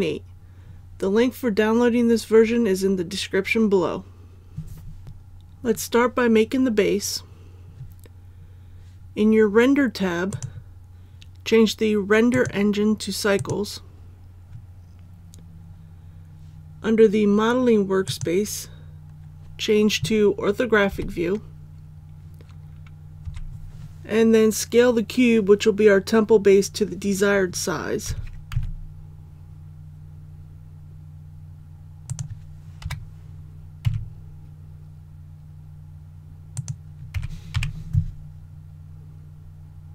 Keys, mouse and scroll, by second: 20.9 KP_5, 23.2 KP_1, 28.0 s, 28.5 z, 32.0 click, 32.8 KP_7, 33.8 s, 36.5 click, 37.1 s, 37.5 y.